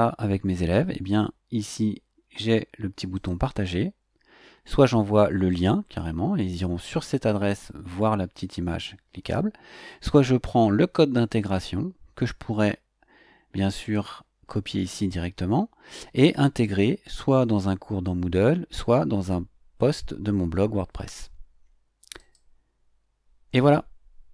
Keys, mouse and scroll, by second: 3.1 click, 5.5-7.8 drag, 10.2-14.1 drag, 22.1 click.